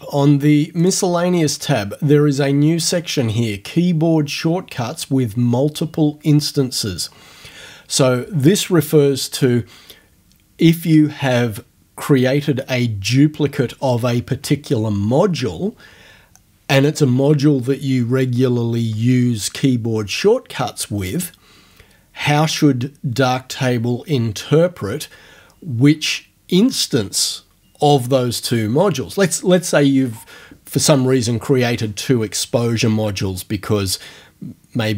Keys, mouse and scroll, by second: 0.8 click.